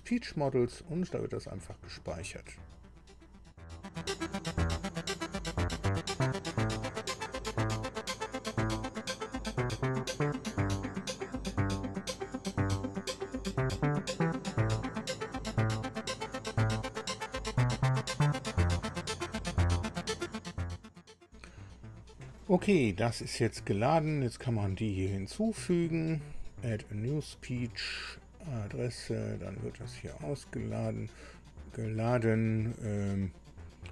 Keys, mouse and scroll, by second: 1.3 click, 3.6 click, 3.7 click, 21.3 alt+Tab, 26.4 click, 28.7 click.